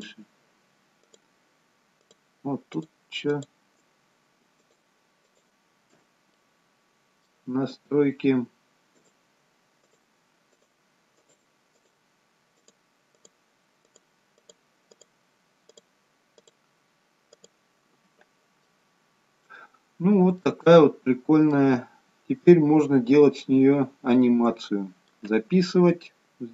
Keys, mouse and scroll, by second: 6.5 middle click, 9.4 shift+click, 10.2-15.3 shift+click, 18.7 middle click, 19.9-20.5 scroll down 1, 20.5 middle click, 22.4-22.9 scroll up 1, 22.9-23.5 scroll down 1, 23.5 middle click.